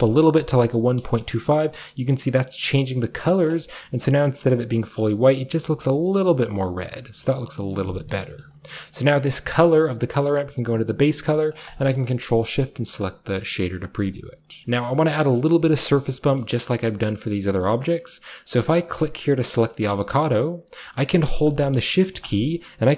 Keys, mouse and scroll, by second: 0.0-0.2 typing, 1.2-4.8 shift+middle drag, 1.3-3.4 shift+scroll up 1, 3.4 shift+scroll up 1, 3.7-4.6 shift+scroll down 1, 4.6-5.7 scroll down 1, 5.1 middle click, 5.1 typing, 5.7 scroll down 1, 6.7 middle click, 6.7-7.2 scroll up 1, 7.2 scroll down 1, 7.7 middle click, 8.1 scroll down 1, 8.5-10.8 middle drag, 9.0 drag, 9.8 click, 9.8-10.8 scroll up 1, 11.7 ctrl+shift+click, 12.4 middle click, 12.4-12.8 scroll down 1, 12.9-14.3 middle drag, 14.2 click, 14.3 typing, 14.9-15.6 shift+middle drag, 15.6-17.3 shift+scroll down 1, 17.3-18.4 shift+scroll down 1, 19.6 scroll down 2, 19.7 middle click, 20.0 middle click, 21.5 click, 22.2 shift+click.